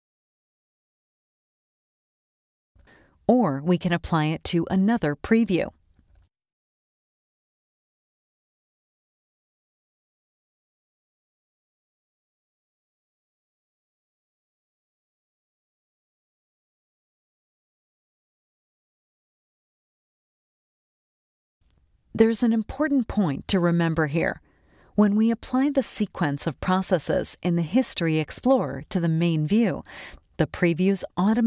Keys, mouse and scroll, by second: 1.6 click, 2.2 click, 4.8 click, 6.6-8.0 drag, 10.0 click, 13.0 click, 14.3 click, 15.9-17.3 drag, 19.6 click, 24.0-27.5 drag, 29.0 click, 30.9 click.